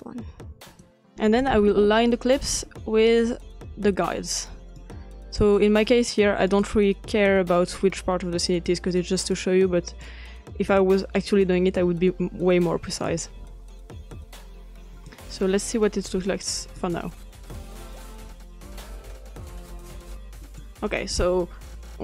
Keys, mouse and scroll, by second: 0.2 click, 0.7-2.4 drag, 2.7-4.0 scroll up 2, 4.0-4.7 ctrl+middle drag, 4.0-4.7 ctrl+scroll up 1, 5.5-12.0 drag, 13.1-16.6 drag, 16.8 click, 20.4-22.0 drag.